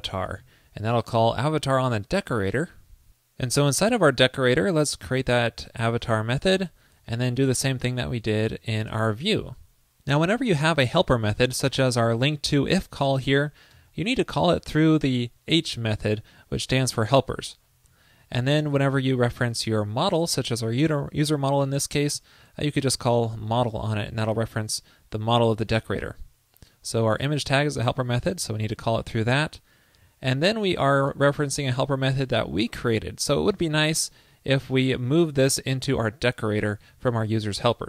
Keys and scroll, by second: 0.4 super+s, 7.6 super+v, 8.6 super+Left, 9.0 alt+Right, 12.1 alt+shift+Right, 18.0 alt+Right, 18.2 alt+Right, 19.2 alt+shift+Right, 25.5 alt+Right, 25.6 alt+Right, 26.1 alt+Right, 28.6 alt+Right, 30.6 alt+Right, 36.8 super+s.